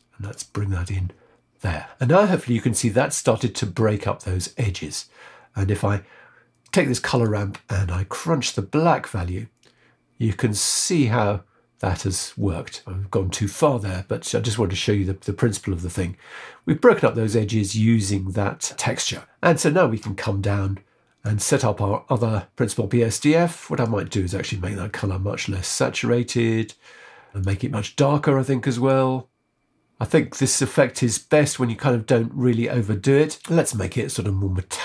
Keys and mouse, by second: 7.2-17.0 drag, 19.3 click, 21.2-22.2 drag, 22.5 middle click, 23.7 click, 27.3 click, 33.4-34.8 drag.